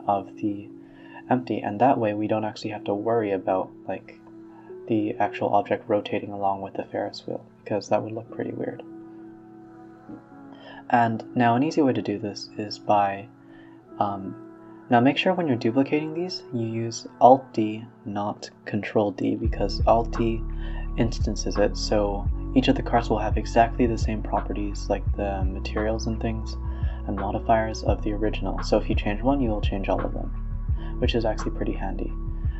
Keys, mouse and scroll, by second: 0.6 alt+d, 1.8 click, 1.9 r, 3.9 KP_Decimal, 4.3 scroll up 2, 4.5 scroll down 4, 4.7-5.1 scroll up 1, 5.1 g, 5.9 click, 6.2 click, 6.4 g, 7.2 alt+d, 7.9 drag, 8.2 shift+click, 8.5 shift+click, 8.9 click, 9.3 shift+click, 9.6 shift+click, 9.8 click, 10.1-10.5 middle drag, 10.5 click, 10.9 shift+click, 11.3 scroll down 2, 11.4 a, 11.5 a, 11.7 click, 11.8 b, 12.5 click, 13.4 shift+click, 14.2-14.7 ctrl+z, 14.9 ctrl+z, 15.1 ctrl+z, 15.3 ctrl+z, 15.5-16.7 ctrl+z, 16.9 ctrl+z, 17.1 ctrl+z, 17.6 g, 18.7 KP_3, 19.9-21.6 drag, 22.9 alt+d, 26.6-28.3 scroll up 2, 28.7 shift+r, 29.2 g, 31.0 shift+r, 31.6 ctrl+z, 32.3 alt+d.